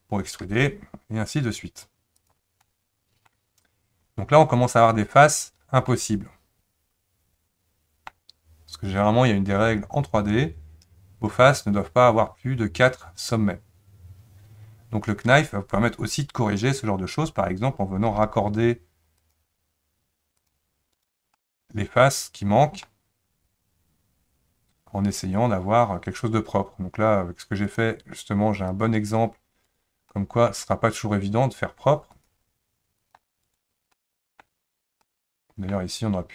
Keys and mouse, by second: 0.5 e, 2.6-3.6 middle drag, 5.2 click, 5.9-8.1 middle drag, 18.1 k, 21.4-36.3 middle drag.